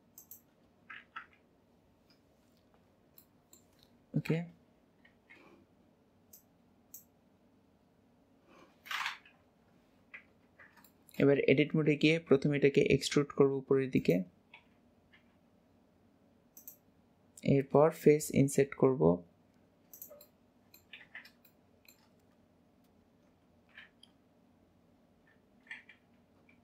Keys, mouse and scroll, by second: 1.3 KP_1, 2.5-3.3 scroll down 6, 3.3-5.2 middle drag, 5.2 shift+h, 6.4-9.5 drag, 9.5 KP_1, 10.1 scroll up 1, 11.0 shift+middle click, 11.4-11.9 scroll up 2, 17.1-18.4 scroll up 1, 18.4-18.7 scroll up 1, 20.3 middle click, 21.5 shift+middle click.